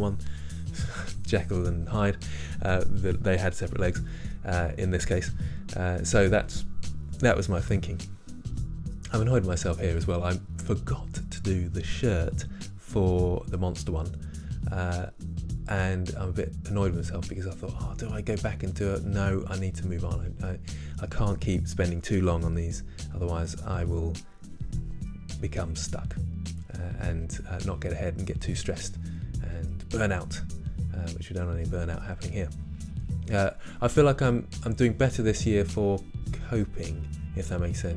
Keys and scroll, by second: 20.1 typing.